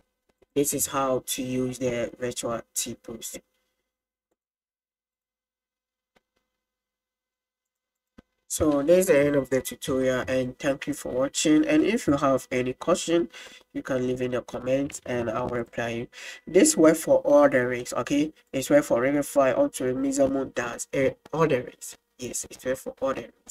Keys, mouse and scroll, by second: 0.5 click, 1.0-1.4 middle drag, 5.3 click, 7.8 click, 8.1 click, 8.4-9.9 middle drag, 8.4 space, 10.1-10.8 shift+middle drag, 10.9-12.5 middle drag, 18.5-23.5 drag.